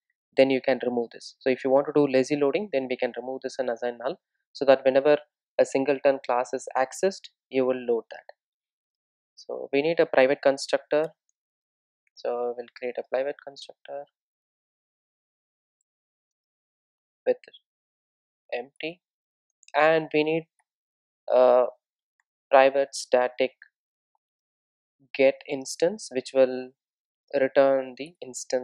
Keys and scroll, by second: 9.9 Return, 13.9 Return, 14.4 super+z, 16.4 super+z, 20.7 Return.